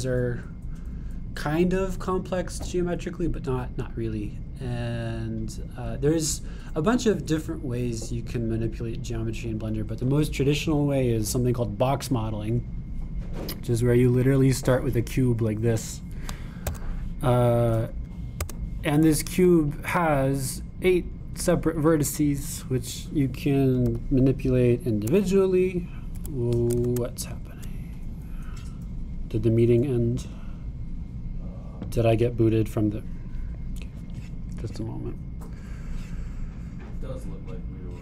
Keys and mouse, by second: 19.5 Tab, 25.0 g.